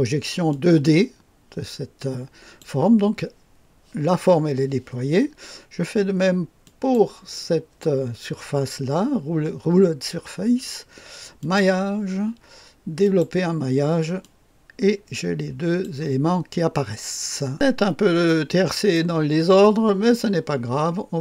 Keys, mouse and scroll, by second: 0.4-2.5 drag, 6.6 click, 11.3 click, 12.9 click, 14.1-15.8 drag, 17.5 click, 17.7-18.3 scroll up 2, 18.3-19.6 right drag, 20.0-21.2 scroll down 2.